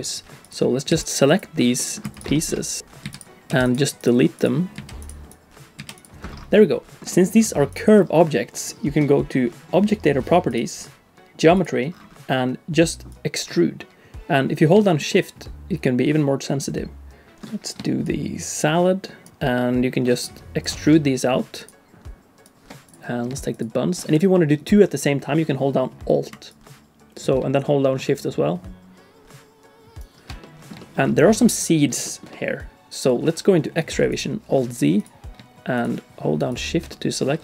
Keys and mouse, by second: 0.4 click, 0.9 x, 1.8 middle click, 2.0 x, 2.3 shift+click, 2.8 x, 3.0 x, 3.5 x, 4.0 click, 4.4 click, 4.7 x, 4.8 x, 5.8 x, 6.5 middle click, 6.7 click, 7.1 middle click, 11.6 click, 13.1-17.3 drag, 17.3 middle click, 18.0-20.6 shift+drag, 21.6 shift+click, 24.0 middle click, 26.6-30.1 alt+drag, 30.4 middle click, 30.8 shift+middle click, 31.1 middle click, 32.0 shift+middle click, 32.3 middle click, 36.4 shift+click, 36.9 middle click.